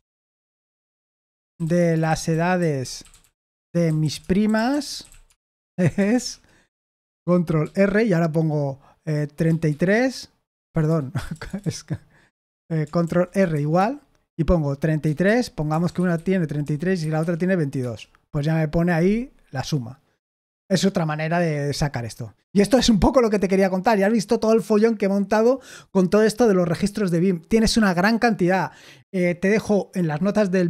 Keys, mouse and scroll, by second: 0.0-6.6 typing, 7.6 ctrl+r, 9.4-11.3 typing, 13.0 ctrl+r, 13.5 =, 15.0-17.2 typing, 17.8 Return.